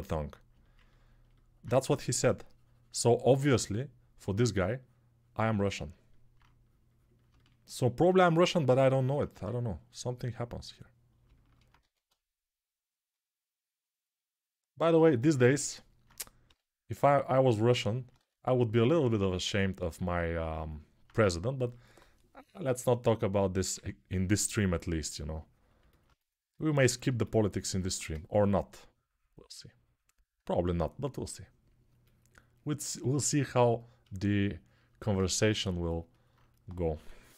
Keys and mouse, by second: 9.1 x, 11.6 1, 15.3-25.5 ctrl+alt+drag, 16.2 g, 18.0 1, 23.5 2, 27.7 1, 27.9-37.2 ctrl+drag, 36.7 6, 37.1 ], 37.2 ].